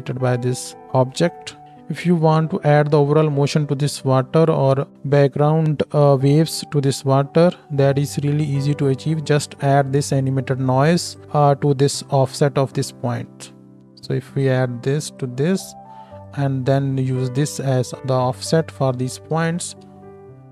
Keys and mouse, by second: 1.6 shift+Left, 1.6 space, 1.8 space, 13.1 space, 19.3 shift+Left, 19.5-20.5 drag, 19.5-20.5 middle drag, 19.5-20.5 right drag, 20.0 space.